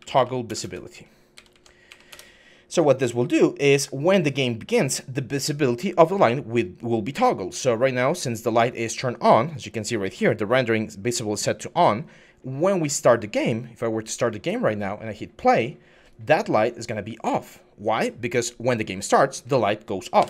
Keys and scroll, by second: 0.0-0.4 typing, 1.2 Down, 1.3 Down, 1.9 Return, 16.9-17.6 typing, 20.0 Escape.